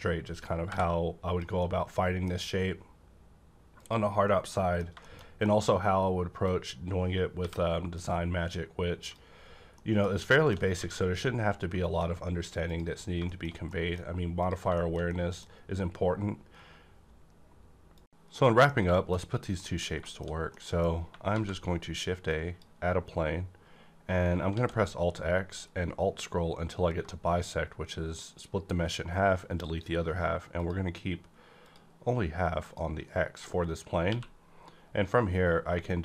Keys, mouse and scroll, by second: 1.5 scroll up 1, 1.5 j, 1.6-4.2 middle drag, 3.7 click, 4.2 scroll down 1, 4.6 middle click, 5.0 shift+middle click, 5.1 shift+scroll down 1, 5.4 middle click, 5.7 scroll up 1, 6.4-9.0 drag, 7.4 j, 9.3 scroll down 1, 9.8 middle click, 10.5 middle click, 10.5 scroll down 1, 10.8 a, 11.0-13.0 middle drag, 12.7 click, 13.0 scroll down 1, 13.2 shift+middle click, 14.4 click, 14.8 middle click, 15.1 middle click, 18.8 shift+middle click, 19.2-19.5 scroll up 2, 19.5 middle click, 19.8-20.5 scroll down 4, 20.0 shift+middle click, 20.5 scroll up 2, 20.5 middle click, 21.3 a, 22.2-25.7 drag, 24.4 x, 25.7-26.6 alt+scroll down 2, 26.6-28.5 alt+scroll down 1, 30.6-31.9 drag, 30.6 alt+scroll down 1, 34.1 q.